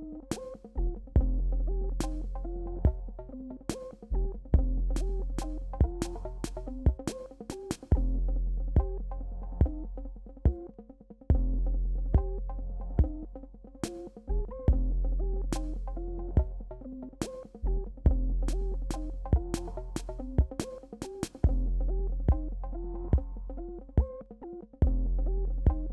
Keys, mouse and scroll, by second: 2.5 space, 3.2 click, 3.2 space, 5.0 [, 5.2 [, 6.0-9.2 drag, 6.0 [, 9.2 click, 10.3 space, 10.4 click, 10.8 space, 11.3-12.7 drag, 12.7-14.3 drag, 14.3 alt+scroll down 1, 15.0 alt+scroll down 1, 16.8 alt+scroll down 1, 17.9-20.0 typing, 19.2 click, 20.4 click, 21.5-23.0 drag, 23.0-25.9 drag.